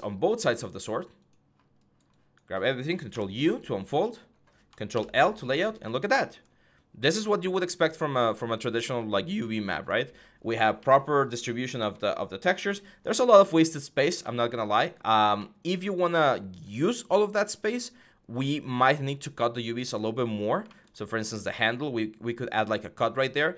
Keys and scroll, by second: 2.9 ctrl+u, 4.7 ctrl+i.